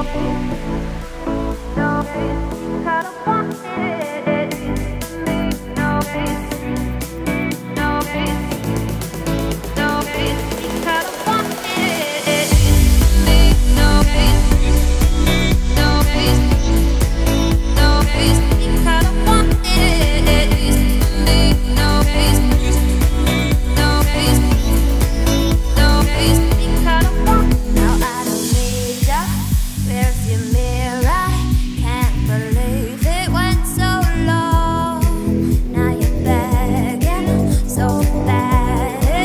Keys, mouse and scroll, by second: 2.5-3.1 scroll down 2, 3.1-3.4 scroll up 1, 3.4 g, 4.4 click, 5.4 g, 6.2 shift+middle click, 6.6 g, 8.6 click, 9.5-12.7 drag, 12.7-13.5 shift+middle drag, 13.5 ., 14.9 r, 21.4 shift+d, 22.9 alt+r, 23.2 alt+g, 23.8 scroll down 3, 24.0 g, 25.4 r, 30.1 scroll up 1, 30.3 r, 33.7 shift+d, 34.2 r, 37.9 scroll up 2, 38.5-39.2 shift+middle drag.